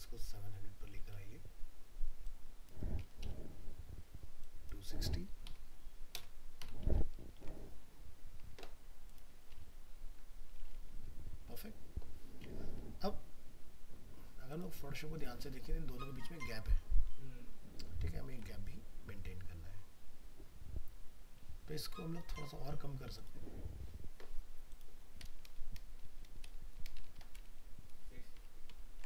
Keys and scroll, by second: 7.0 ctrl+s, 18.3 alt+Tab, 28.8 ctrl+s.